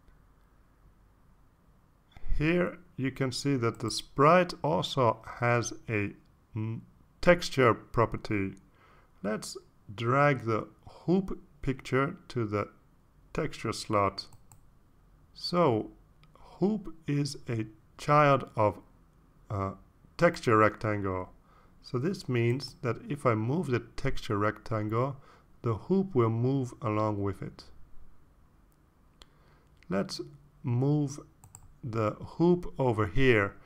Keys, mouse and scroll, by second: 0.8-2.7 typing, 3.0 Return, 13.1-15.9 drag, 25.1 click, 26.1-28.9 drag, 30.0 ctrl+z, 31.8-33.4 drag.